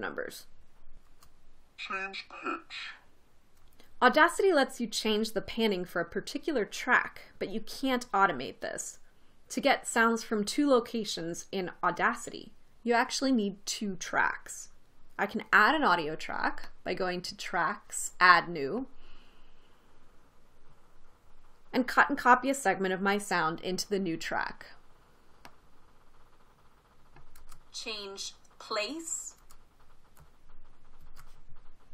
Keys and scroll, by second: 1.7 space, 28.0 space, 30.0 space, 31.6 super+x.